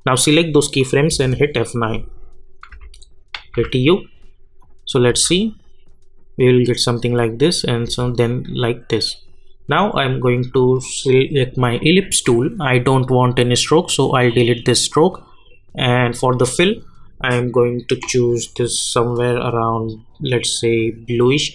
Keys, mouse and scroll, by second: 1.1 F9, 1.8 click, 2.7 u, 3.5 u, 4.6 click, 5.1 space, 7.8 space, 9.9-21.5 drag.